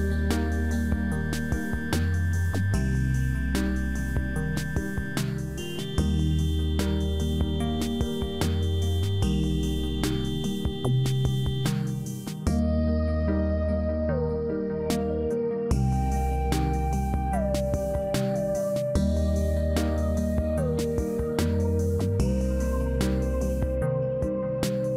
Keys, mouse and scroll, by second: 4.5-6.5 scroll down 17, 6.6-7.2 scroll up 1, 7.2-8.3 scroll up 4, 8.3-8.6 scroll up 1, 8.6 s, 14.6 scroll up 1, 15.8 scroll up 9, 16.4 click, 17.6 click, 18.9 s, 21.5-21.9 scroll up 2, 22.9 click, 24.0 click.